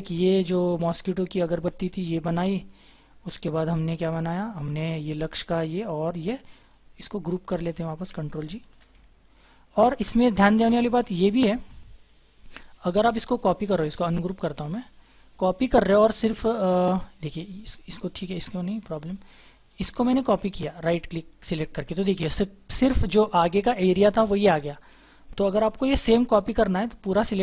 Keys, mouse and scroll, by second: 1.6-3.2 scroll down 1, 4.4-5.8 scroll up 1, 5.9 scroll down 1, 8.8 ctrl+g, 9.2-10.9 scroll up 1, 11.0 scroll down 1, 13.6 right click, 14.8 double click, 18.6-19.9 scroll up 1, 21.3 right click, 23.9-24.6 scroll down 1, 24.6 scroll down 1, 24.6-25.7 scroll up 1, 25.7 Delete.